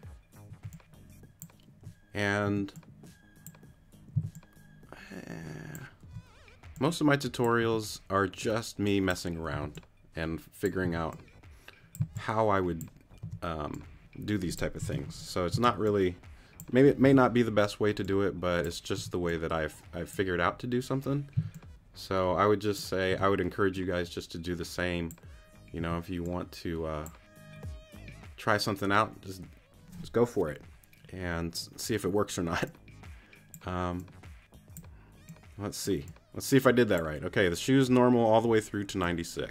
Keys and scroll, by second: 0.9 c, 2.4 t, 4.1 c, 7.6 t, 9.5 t, 10.8 t, 12.9 c, 13.2 t, 15.5 super+c, 17.0 t, 19.0 t, 21.3 c, 23.1 t, 25.8 t.